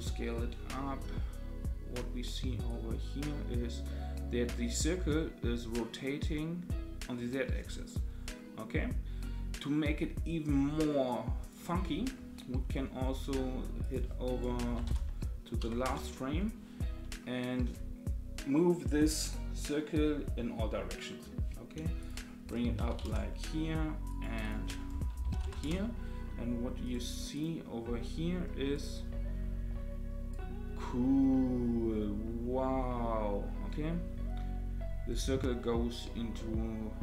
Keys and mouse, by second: 2.7-11.5 drag, 13.8-16.5 drag, 22.0-24.2 drag, 24.4-27.4 drag, 26.8 right click, 28.8-37.0 drag.